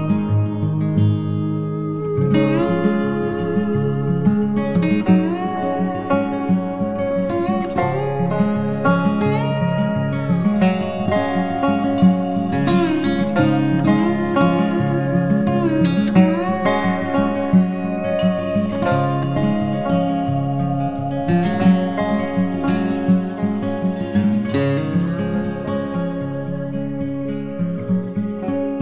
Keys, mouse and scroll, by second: 4.5 alt+shift+click, 9.9 alt+shift+click, 24.4-26.7 typing, 28.7-28.8 typing.